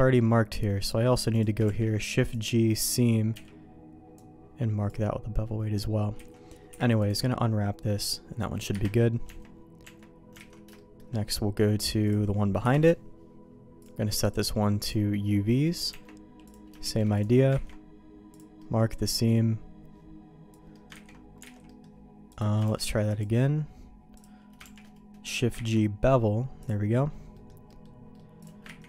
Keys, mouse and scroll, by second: 1.3 click, 1.6 shift+g, 3.3 n, 4.2 click, 6.1 a, 6.7 u, 8.7 KP_Divide, 9.2 Tab, 9.8 Tab, 10.4 alt+a, 10.7 shift+middle click, 12.0 click, 12.6 KP_Divide, 15.6 middle click, 15.9 Tab, 16.4 click, 16.8 shift+g, 17.5 ctrl+e, 18.6 middle click, 20.7 ctrl+middle click, 21.0 ctrl+z, 21.5 alt+a, 21.6 middle click, 22.3 click, 22.8 shift+g, 24.1 click, 24.9 shift+g, 25.5 ctrl+e, 27.3 middle click, 27.6 middle click, 28.1 middle click, 28.4 click.